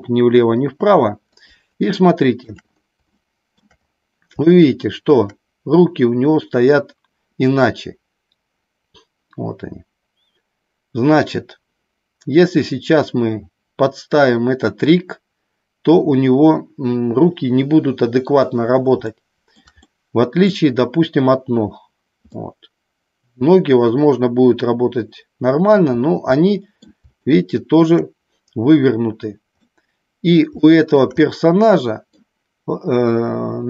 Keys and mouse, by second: 1.3 click, 1.9 shift+middle click, 3.0 shift+middle click, 4.4 shift+middle click, 19.0-19.5 shift+middle drag, 19.8-20.4 middle drag, 22.3-25.7 middle drag, 26.3 middle click, 27.1 shift+middle click, 29.7 middle click, 30.5 shift+middle click, 31.2-32.2 middle drag.